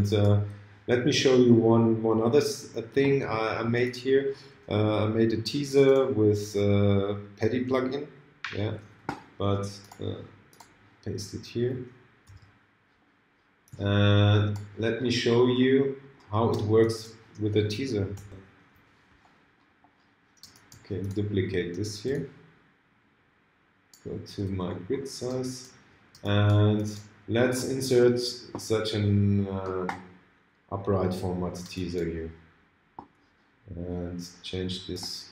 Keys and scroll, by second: 18.3 ctrl+l.